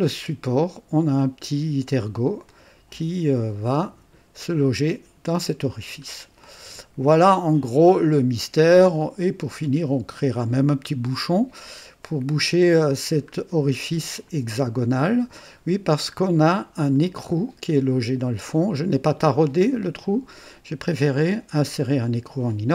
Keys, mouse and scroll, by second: 0.1 space, 0.1 space, 2.5 click, 2.8-3.4 typing, 5.8-6.2 scroll down 1, 6.4-9.4 drag, 13.3 scroll up 1, 14.2 click, 14.4 space, 14.8-17.2 drag, 17.3 right click.